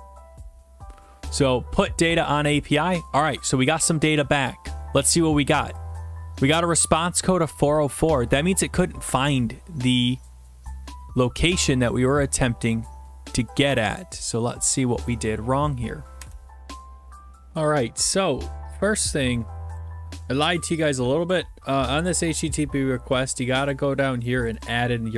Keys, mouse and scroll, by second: 1.4 click, 6.5 click, 9.1-10.4 scroll, 11.3-12.3 scroll, 12.3 scroll, 13.7 click, 14.8 click, 16.6 click, 18.3-19.9 scroll, 21.3 click, 22.5 right click, 23.7 right click, 24.5 click, 24.6 click.